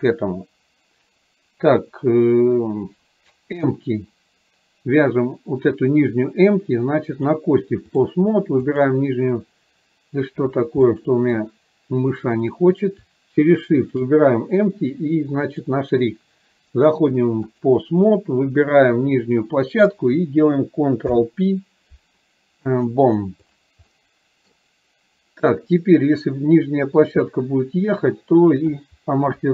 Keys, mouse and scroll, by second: 7.3-8.3 drag, 10.9-11.5 middle drag, 12.5 click, 13.9 shift+click, 15.5-17.8 drag, 19.4 click, 23.0 ctrl+p, 23.9-24.6 middle drag, 27.4-28.9 drag.